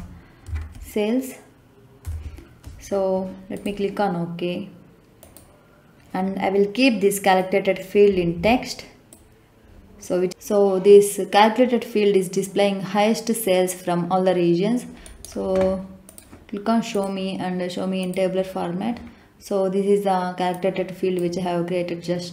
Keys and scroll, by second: 0.4 s, 2.0 Return.